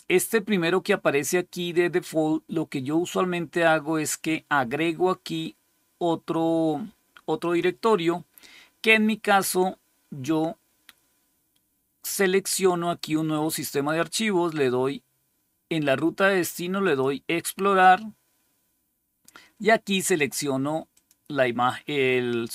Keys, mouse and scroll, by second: 7.3 click, 16.7 click, 20.8 click.